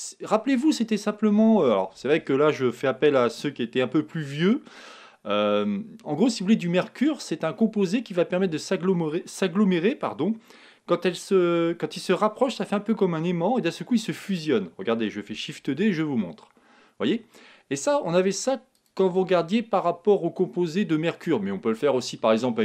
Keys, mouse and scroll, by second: 15.6 shift+d, 18.8-20.6 drag.